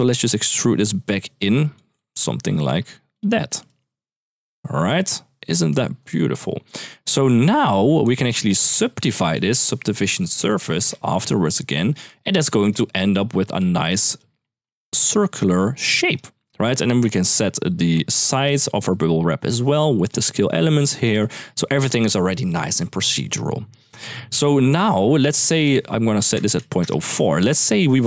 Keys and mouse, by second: 1.7-2.9 shift+drag, 3.4-4.6 shift+drag, 5.6 shift+middle drag, 6.7 middle click, 8.4 shift+a, 10.4 Down, 11.2 click, 14.0-15.9 shift+drag, 17.1-19.9 shift+drag, 21.1 ctrl+s, 25.1-26.6 drag, 27.4 shift+middle drag.